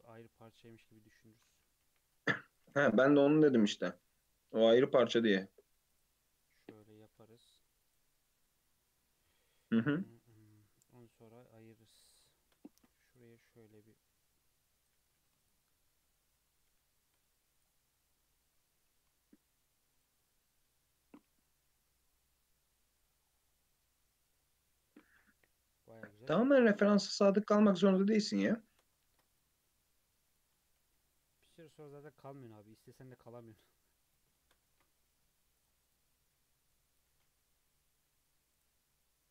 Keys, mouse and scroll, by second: 0.1 KP_3, 0.7-1.2 scroll up 3, 1.2 Tab, 1.4 alt+z, 1.8 1, 2.1 click, 2.6 g, 3.8 g, 6.4 click, 7.0 g, 8.4 Tab, 8.7 Tab, 9.1 2, 9.3 click, 10.1 Tab, 10.4 Tab, 11.2 Tab, 11.6 Tab, 12.3-12.7 shift+middle drag, 12.7 ctrl+r, 15.0 2, 15.4 alt+click, 16.2 g, 17.9 scroll down 1, 18.1 middle click, 18.8 s, 20.9 Tab, 21.2 alt+z, 21.5 scroll down 1, 21.7-23.2 middle drag, 23.2 scroll down 1, 23.5-26.6 middle drag, 27.0 KP_3, 27.4-27.9 scroll up 3, 27.9 Tab, 28.1 alt+z, 28.4 scroll up 1, 28.7 shift+middle click, 29.1 ctrl+r, 30.5-31.2 scroll up 6, 30.7 1, 31.4 drag, 31.9 g, 34.4 shift+middle click, 34.7 ctrl+r, 36.7 drag, 37.1 g.